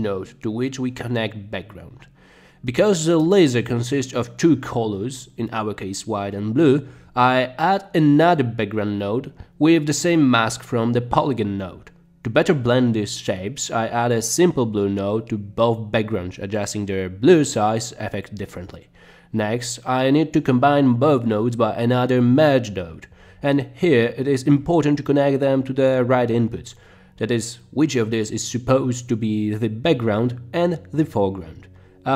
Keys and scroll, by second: 0.0-0.8 typing, 5.5 Delete, 6.8 Delete, 10.9-11.9 typing, 15.5-16.5 typing, 19.2 b, 19.6 Return, 22.9 m, 23.9 Return.